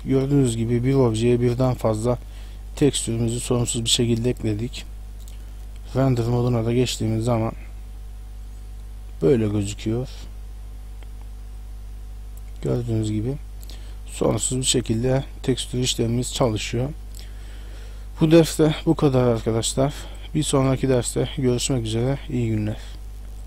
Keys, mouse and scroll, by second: 0.5 shift+middle click, 1.2 middle click, 4.8 Tab, 6.4 click, 7.9 middle click, 7.9 scroll up 1, 20.3 click.